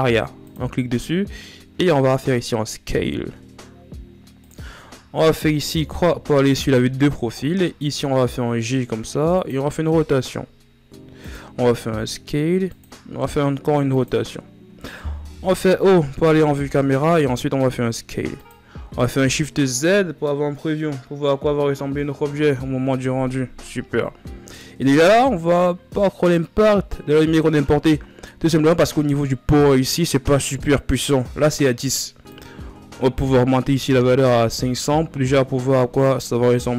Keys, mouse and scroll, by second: 4.5-5.5 scroll down 2, 5.5 KP_3, 7.2-8.1 shift+scroll down 2, 8.1 shift+scroll down 1, 8.2 g, 9.2 r, 11.2 s, 12.7 r, 14.9 KP_0, 16.1 scroll down 1, 16.4-16.9 scroll up 2, 16.9 s, 18.5 shift+z, 23.0-23.5 scroll up 3, 32.5-34.1 drag, 34.1 KP_0.